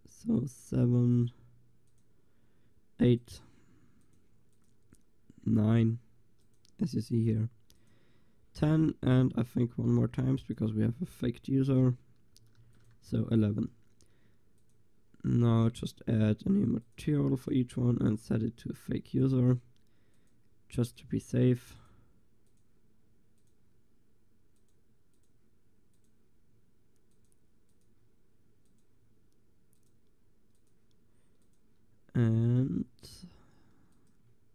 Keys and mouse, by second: 6.0 middle click, 8.0-9.2 drag, 12.6 ctrl+s, 14.7-16.2 drag, 18.3 click, 28.9 click.